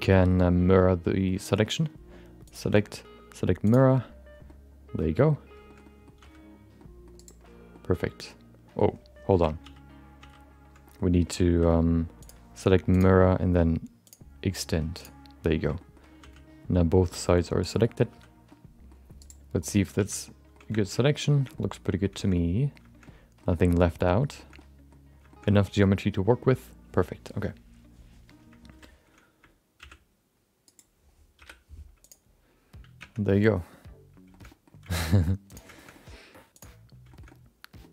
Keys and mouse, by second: 0.6 middle click, 2.5-3.7 drag, 4.4 middle click, 5.6 shift+middle click, 5.8 middle click, 6.1 c, 7.7-8.7 middle drag, 9.6 ctrl+z, 10.2 ctrl+z, 10.8 middle click, 12.2 click, 14.0 click, 15.6 middle click, 16.2 c, 17.8 middle click, 18.0 c, 19.9 alt+z, 20.2 middle click, 20.8 shift+middle click, 20.9 middle click, 21.3 shift+middle click, 21.5 middle click, 22.1 shift+middle click, 22.3 middle click, 23.0 middle click, 23.5 shift+middle click, 23.8 middle click, 24.3 shift+middle click, 24.5 middle click, 25.3 shift+middle click, 25.4 middle click, 26.4 middle click, 28.7 alt+z, 29.8 shift+d, 31.3 p, 33.8 Tab, 34.3 shift+middle click, 34.4 middle click, 34.9 shift+middle click, 35.1 middle click, 35.9 middle click, 36.5 click, 37.1 shift+middle click, 37.2 middle click.